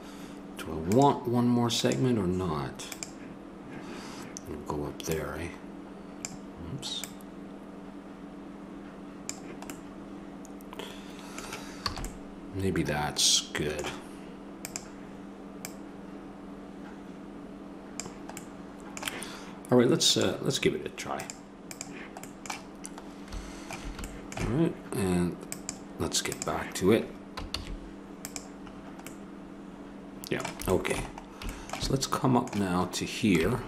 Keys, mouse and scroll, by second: 0.9-8.7 drag, 12.1 a, 14.6 right click, 15.4-17.3 drag, 17.6 middle click, 20.0-24.1 drag, 25.5-27.3 drag, 27.5 shift+s, 29.1-31.0 middle drag, 31.2 middle click, 32.3 middle click, 33.4 Tab.